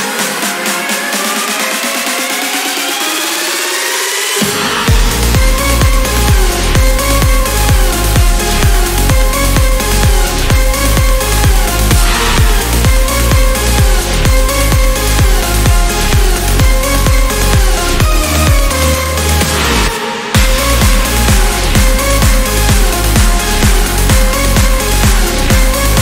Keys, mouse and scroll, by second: 0.0 scroll up 2, 0.8-1.1 scroll down 1, 1.6 scroll up 2, 3.6 click, 5.3 click, 6.5 click, 9.9 click, 13.9-14.2 scroll up 2, 15.4 click, 16.1 scroll down 2, 18.0 click, 19.9 click, 20.7 scroll down 2, 21.2 click, 23.2 click, 24.9 ctrl+click, 25.4-25.8 ctrl+scroll up 2.